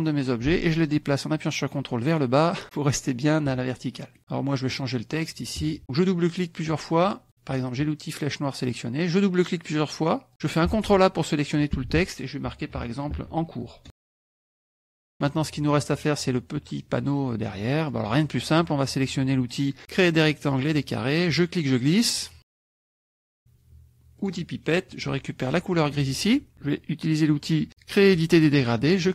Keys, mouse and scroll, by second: 4.2 middle click, 4.2 scroll down 1, 4.7 click, 5.2 click, 7.3 click, 10.7 ctrl+a, 13.1 shift+e, 13.8 shift+space, 14.3 Return, 14.5 s, 15.1 click, 17.6 click, 20.2 click, 21.2-23.3 drag, 24.2 click, 26.0 click, 28.0 click.